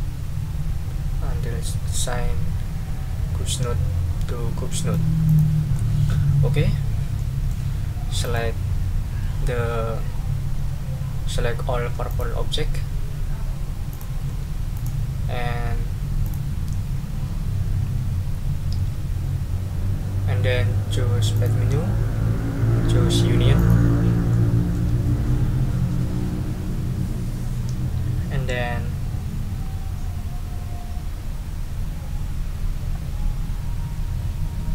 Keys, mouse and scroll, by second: 5.2 click, 5.7 middle click, 5.9 click, 7.1 click, 7.3 middle click, 8.2 click, 12.1 shift+click, 13.9 shift+click, 14.7 shift+right click, 16.2 click, 21.3 click, 23.6 click, 24.3 middle click.